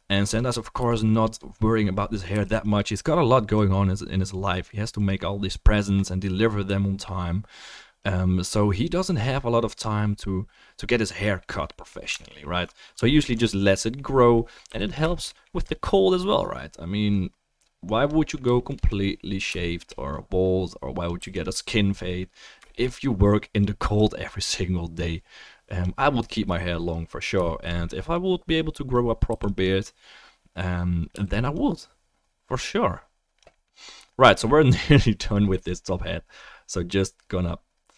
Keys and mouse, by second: 0.8 f, 1.3 click, 2.4 f, 2.8 click, 12.2 alt+middle click, 12.5 alt+middle click, 13.0 alt+middle click, 13.6 middle click, 14.7 f, 14.9 shift+click, 18.2-19.5 shift+middle drag, 21.2 f, 21.4 click, 29.3 f, 29.6 click, 31.1 f, 31.4 click.